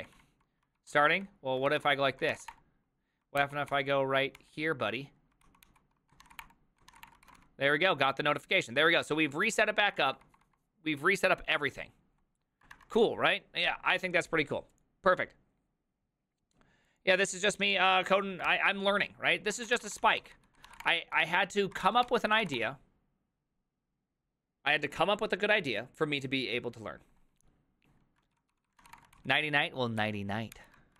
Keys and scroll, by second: 0.0-2.9 typing, 0.8 ctrl+c, 3.4 ctrl+t, 3.7 ctrl+n, 4.4 ctrl+s, 5.4 ctrl+t, 5.7 ctrl+h, 6.0-8.9 typing, 7.1 Return, 19.6 alt+{, 19.6 ctrl+w, 19.7-22.9 typing, 19.9 ctrl+w, 20.0 ctrl+o, 20.2 ctrl+c, 20.3 ctrl+c, 28.5 ctrl+c, 28.5-29.4 typing, 30.0 ctrl+t, 30.6 ctrl+h.